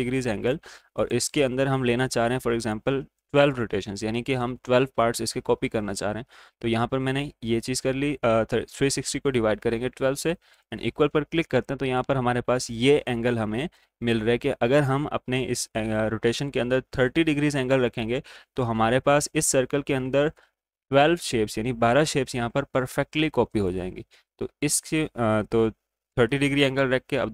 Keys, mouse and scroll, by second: 10.5-14.4 drag, 10.5 typing, 14.4 typing, 23.5 click, 23.5 typing.